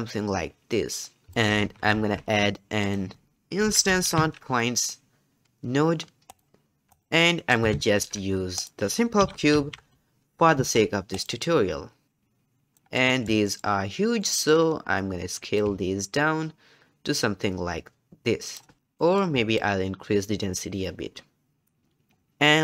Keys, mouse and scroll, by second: 1.3 g, 1.6 alt+a, 7.3-7.8 middle drag, 7.8 shift+a, 12.0-12.8 drag, 12.8 scroll down 1, 13.0-13.9 middle drag, 13.9 scroll up 1, 14.2 middle click, 14.5-15.5 scroll up 3, 15.5-18.5 drag, 18.8 click, 19.0 middle click, 19.6-21.5 shift+drag, 21.5-22.3 middle drag, 22.3-22.6 drag.